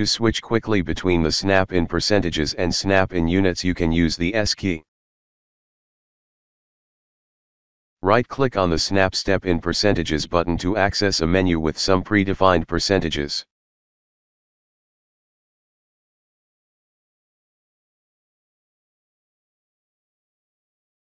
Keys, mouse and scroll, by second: 9.0 right click, 12.1 click, 16.0 right click, 17.6 click.